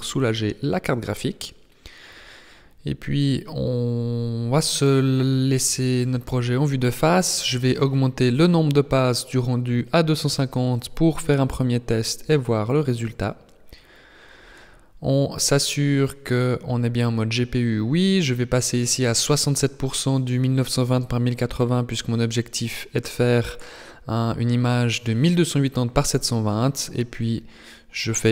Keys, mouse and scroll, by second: 3.1 KP_1, 5.4 scroll down 4, 8.3 click, 15.2-16.2 scroll up 1, 16.2 click, 16.2-18.4 scroll up 2, 20.8-22.4 scroll up 5, 22.4 ctrl+s, 25.7 click.